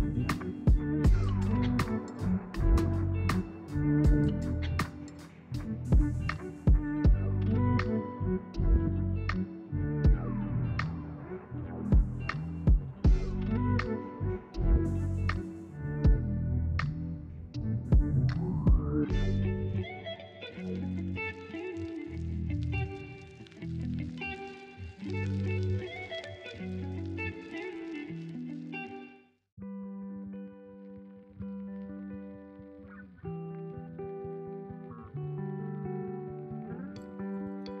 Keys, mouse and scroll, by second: 2.3 Tab, 4.9 click, 5.9-8.8 middle drag, 8.8-9.8 scroll up 1, 9.8-10.5 middle drag, 10.5 Tab, 10.7-13.7 middle drag, 15.5-17.3 drag, 17.3 Tab, 18.4 Tab, 18.7 click, 19.0 scroll down 1, 19.1-22.5 middle drag, 22.5 scroll down 1, 22.7-23.4 middle drag, 23.4 click, 24.2 click, 25.1 middle click, 25.9-26.6 scroll up 1, 26.6-27.6 middle drag, 27.6 click, 28.3 KP_1, 29.3-29.9 scroll up 1, 31.7-33.7 middle drag, 33.7-34.3 drag, 34.3-35.2 right drag, 34.3 middle click, 35.2 Tab, 35.9-37.8 right drag, 35.9 middle click.